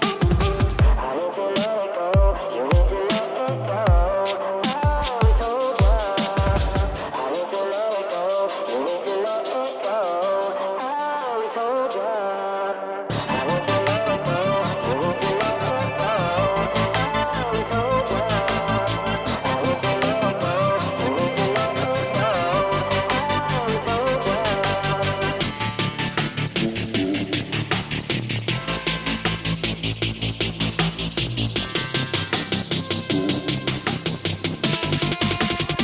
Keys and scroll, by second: 19.3 ctrl+i, 21.2 alt+space, 22.1 [, 25.5 ctrl+z.